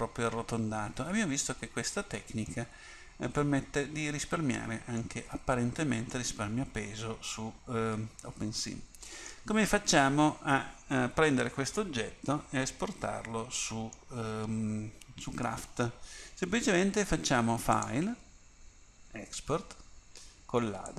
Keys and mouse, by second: 2.6-3.6 middle drag, 6.3-7.3 middle drag, 11.9-13.7 middle drag, 17.7-19.6 drag.